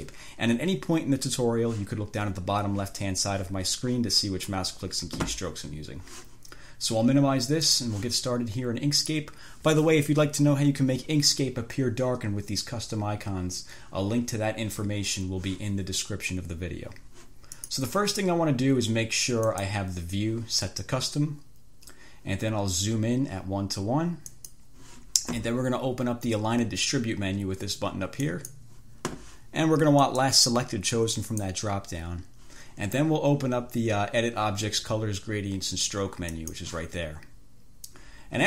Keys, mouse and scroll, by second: 7.9 click, 9.2 click, 17.8 click, 19.7 click, 24.6 click, 28.5 click, 30.3 click, 31.5 click, 36.6 click.